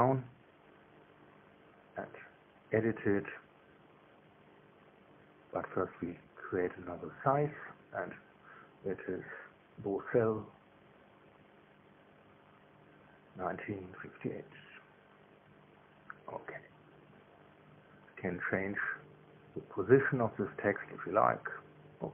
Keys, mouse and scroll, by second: 0.0 y, 2.0 click, 4.2 click, 5.0 KP_0, 5.1 KP_Decimal, 5.5 KP_6, 6.1 KP_Enter, 7.5 Tab, 8.4 BackSpace, 8.5 BackSpace, 9.2 BackSpace, 10.7-15.2 typing, 17.5 Tab, 18.8 g, 20.8 y, 22.0 click.